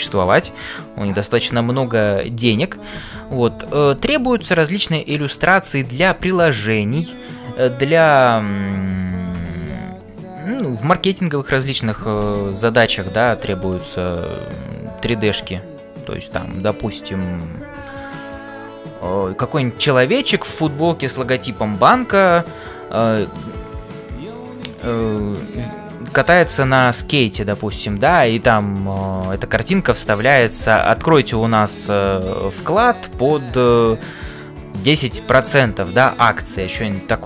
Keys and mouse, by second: 14.4-16.3 middle drag.